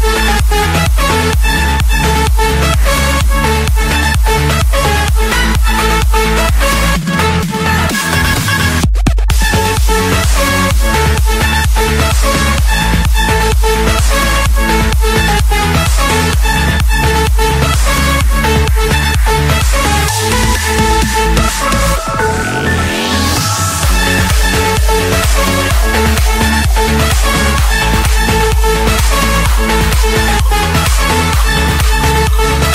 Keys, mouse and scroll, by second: 0.0-0.3 typing, 2.4 ctrl+a, 4.4-5.5 drag, 9.6-10.7 drag, 12.0-15.8 middle drag, 12.0-12.8 scroll, 12.8-13.8 scroll, 13.8-15.7 scroll, 18.2-19.4 drag, 20.1-21.2 drag, 22.0-23.1 drag, 23.3-24.4 drag, 25.2-26.3 drag, 27.1 Escape, 29.9 click.